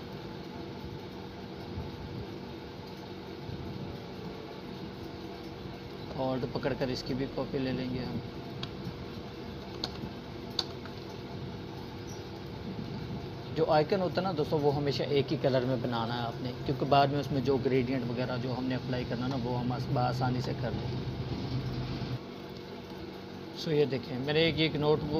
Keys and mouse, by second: 2.5-4.7 alt+drag, 5.7 ctrl+d, 8.1 click, 18.3-20.4 drag.